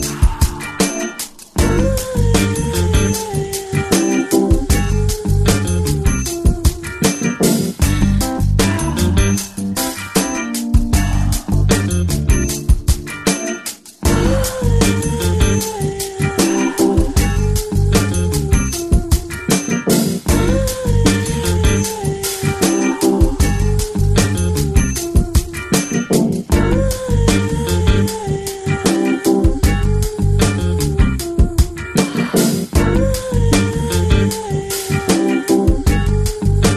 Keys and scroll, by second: 32.2 f, 32.8 f, 34.1 f, 34.7 space.